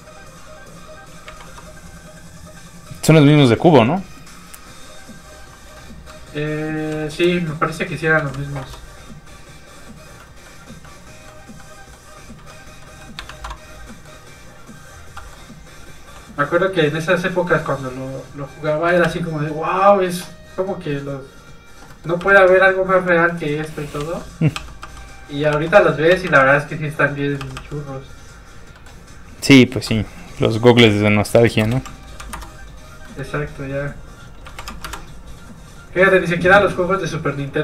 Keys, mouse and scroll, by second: 0.6 click, 1.2 KP_1, 1.4 Return, 5.0 KP_1, 6.8 KP_2, 7.1 Return, 7.8 click, 8.1 KP_2, 8.6 KP_2, 10.2 middle click, 13.4 alt+shift+z, 13.5 alt+scroll down 2, 13.9 middle click, 14.3 alt+z, 14.4 click, 15.1 middle click, 16.7 click, 19.0 r, 19.7 click, 21.9 middle click, 22.2 r, 22.9 click, 23.2 scroll up 1, 23.4 middle click, 23.6 alt+shift+z, 24.5 alt+z, 24.6 r, 25.4 click, 25.5 alt+r, 26.1 r, 26.2 r, 26.7 click, 27.1 middle click, 28.5 click, 28.7 middle click, 29.9 click, 30.7 KP_2, 31.6 BackSpace, 32.2 KP_5, 32.3 Return, 33.0 middle click, 33.9 click, 34.4 KP_1, 34.6 KP_5, 34.8 Return, 35.4 click.